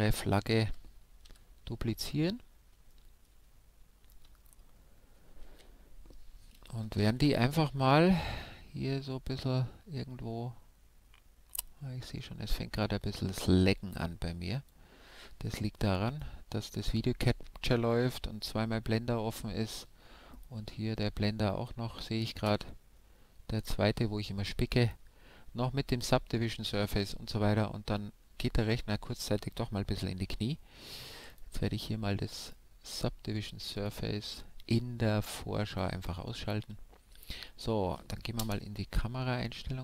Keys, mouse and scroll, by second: 1.3 KP_5, 6.0 shift+d, 15.0-16.7 drag, 16.7-19.0 right drag, 19.0-20.9 middle drag, 31.3-32.9 drag, 32.9 middle click, 33.2-35.7 right drag, 35.7-37.5 drag, 36.3-39.5 middle drag, 38.4 KP_0, 39.7-39.8 middle drag.